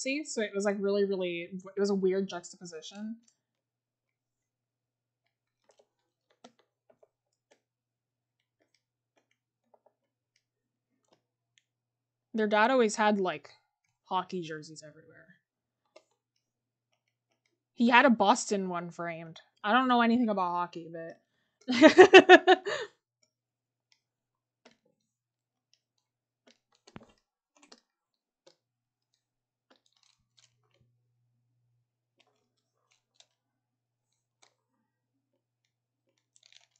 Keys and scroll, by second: 26.7 scroll.